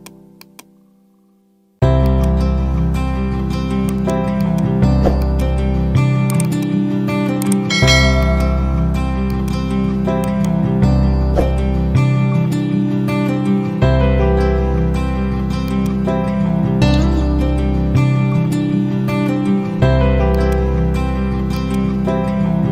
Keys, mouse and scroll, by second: 3.8 right click, 4.3 click, 7.7 ctrl+z, 8.1 click, 10.1 ctrl+right click, 11.1-14.2 scroll up 1, 15.6 click, 20.3 click.